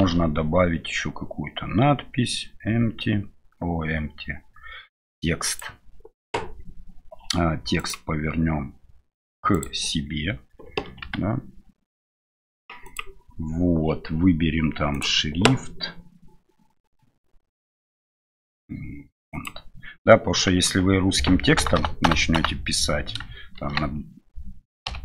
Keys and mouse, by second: 0.0 shift+a, 23.5 shift+v.